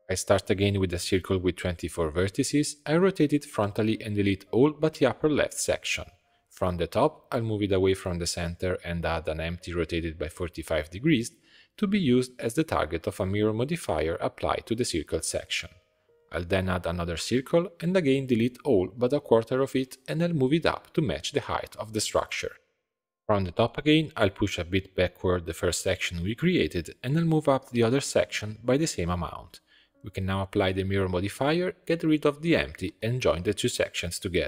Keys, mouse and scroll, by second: 0.0 shift+a, 1.1-2.2 drag, 2.2 Tab, 2.6 r, 3.8 click, 4.0 b, 4.9 b, 5.6 x, 6.2 a, 6.9 click, 7.6 click, 8.1 g, 9.2 Tab, 9.4 click, 9.6 shift+a, 11.1 r, 11.9 click, 12.9 click, 13.4-15.1 drag, 16.4 click, 16.6 shift+a, 18.4 Tab, 18.5 click, 20.0 b, 21.0 x, 21.6 g, 22.6 Tab, 22.9-23.2 middle drag, 23.2-23.6 scroll up 7, 23.6 g, 25.5 Tab, 25.6 scroll down 1, 25.9-26.6 middle drag, 26.6 click, 26.8 Tab, 27.1 g, 28.7 Tab, 28.9 scroll down 2, 29.1-29.6 middle drag, 29.6 click, 30.4 ctrl+a, 30.7-31.4 scroll down 2, 31.4 click, 31.9 Delete, 32.6 click, 33.1 shift+click, 33.8 ctrl+j, 34.2 scroll down 1.